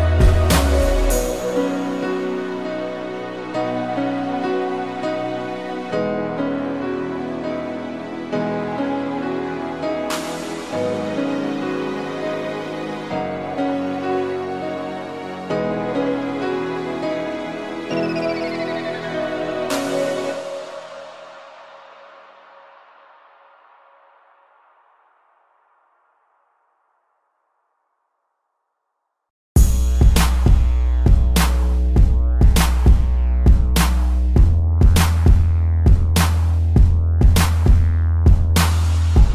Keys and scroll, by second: 0.1 space, 1.4 space, 4.0 space, 4.6 ctrl+z, 5.4 space, 6.2 space, 9.7 a, 10.3 space, 11.0 ctrl+-, 12.0 space, 13.2 p, 13.5 ctrl+=, 13.7 space, 13.9 ctrl+-, 14.1 space, 15.1 ctrl+=, 15.2 space, 17.7 space, 21.2 space, 22.8 space, 23.6 ctrl+-, 23.8 space, 33.7 space, 35.3 space, 37.7 space, 38.4 ctrl+=, 38.7 space.